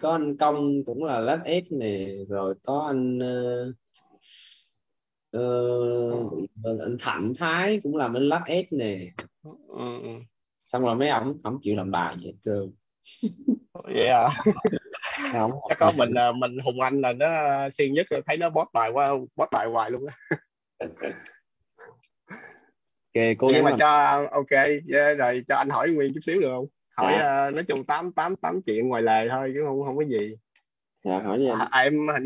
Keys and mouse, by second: 8.3 click, 18.3 click.